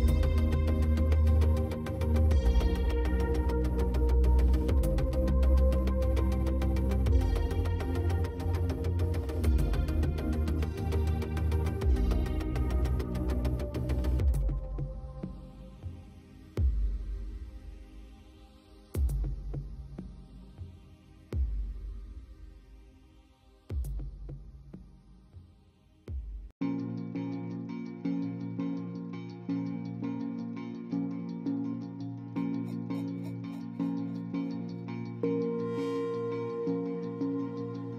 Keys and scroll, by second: 5.5 space, 33.1 space, 35.3 ctrl+space.